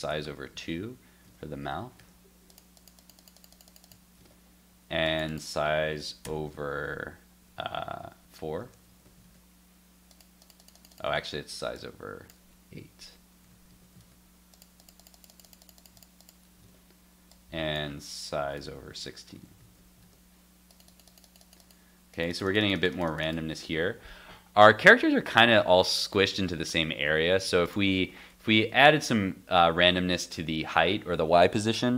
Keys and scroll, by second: 0.5 super+s, 1.2 super+Tab, 1.9 super+r, 4.2 super+Tab, 8.6 super+s, 8.9 super+Tab, 9.2 super+r, 11.1 super+Tab, 13.5 super+s, 13.7 super+Tab, 14.0 super+r, 16.6 super+Tab, 19.3 super+s, 19.6 super+Tab, 20.0 super+r.